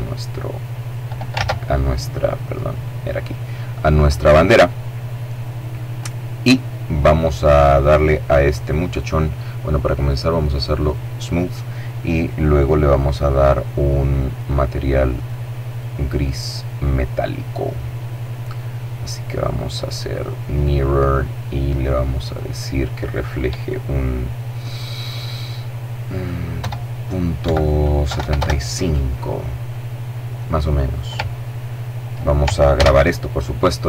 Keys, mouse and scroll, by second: 0.4 ctrl+z, 1.4-2.6 drag, 5.1 right click, 9.8 click, 11.2 scroll up 1, 11.4-12.0 scroll down 1, 13.4 click, 14.2 click, 15.8-16.4 scroll down 1, 16.6-17.2 scroll up 1, 19.2 click, 21.2 click, 25.6 KP_0, 26.5 KP_Decimal, 27.1 KP_7, 27.2 KP_5, 27.4 KP_Enter, 31.8 s, 33.4 click.